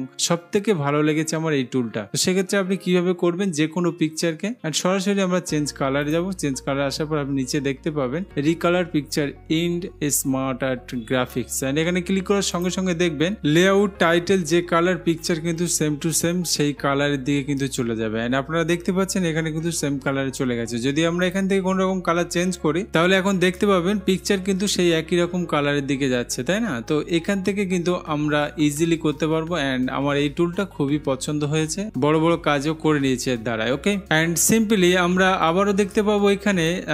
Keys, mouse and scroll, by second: 6.3 click, 12.8 click, 21.5 click, 36.0 click.